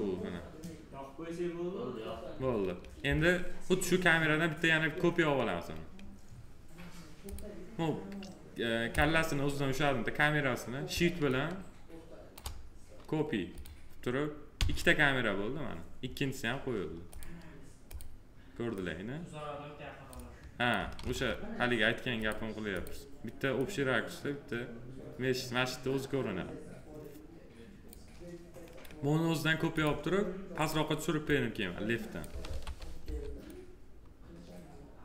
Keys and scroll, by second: 14.5 c, 20.9 ctrl+z, 32.3 ctrl+z, 32.9 s.